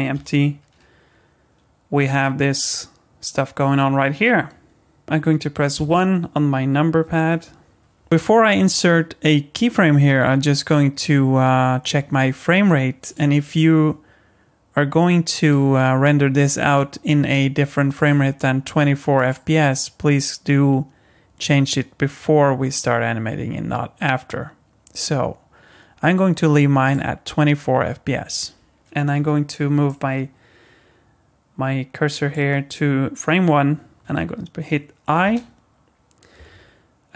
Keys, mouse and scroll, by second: 0.1 g, 5.0 ctrl+z, 5.7 KP_1, 13.1 click, 13.5 click, 17.9 click, 19.2 click, 28.8 KP_1, 29.9 click.